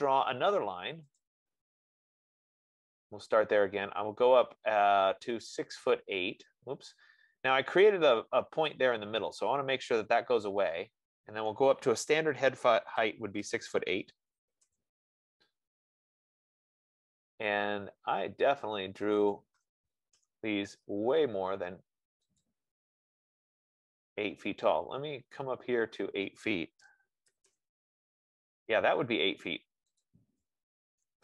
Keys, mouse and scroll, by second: 12.6-13.7 typing, 14.9 Return, 19.6 click, 20.4 Return, 22.8 click, 27.2-27.7 typing, 30.3 click.